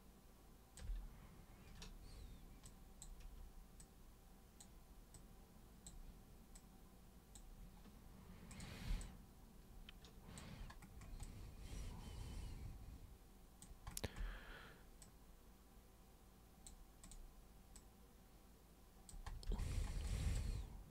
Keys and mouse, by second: 0.0 alt+super+click, 2.6-3.0 super+drag, 3.8 super+click, 5.1 super+click, 6.6 super+click, 8.5 super+click, 9.0-10.4 alt+super+drag, 11.2-13.6 alt+super+drag, 15.0 super+click, 17.0 super+click, 17.7 super+click, 20.0 alt+super+click.